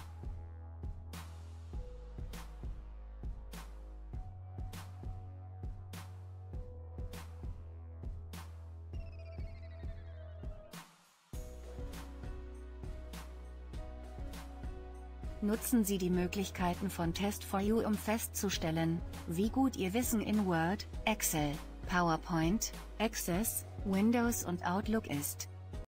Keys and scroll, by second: 3.6 ctrl+F11, 8.5 ctrl+F11.